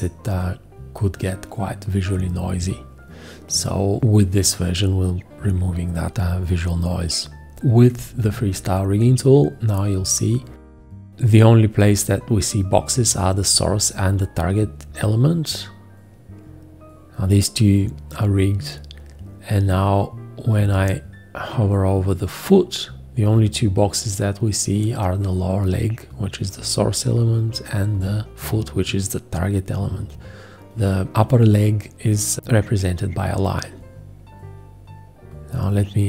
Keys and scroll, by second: 7.6 F4.